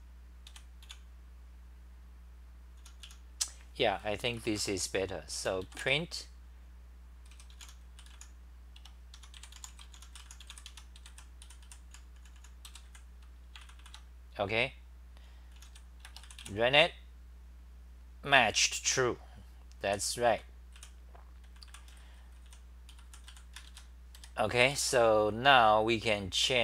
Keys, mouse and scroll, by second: 0.0-1.4 typing, 2.9 t, 3.0 t, 4.4 Return, 4.5 Return, 5.4 u, 9.1-13.8 typing, 10.7 Home, 13.8 ctrl+c, 15.3-16.2 typing, 20.1-24.2 typing.